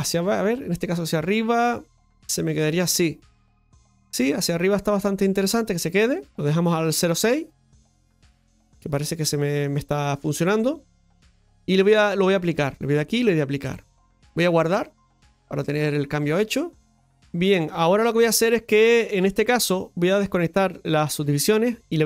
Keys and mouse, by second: 0.1-6.3 drag, 7.5-9.6 middle drag, 12.5-15.8 drag, 16.8-18.4 middle drag, 18.6-20.5 shift+middle drag, 20.5 click, 21.6 middle click.